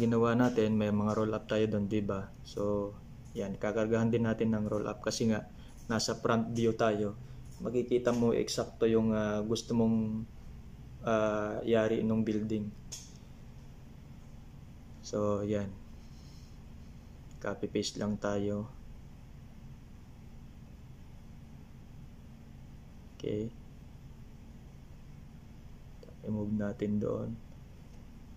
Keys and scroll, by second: 18.6 ctrl+v, 20.9 Delete, 23.0 Down.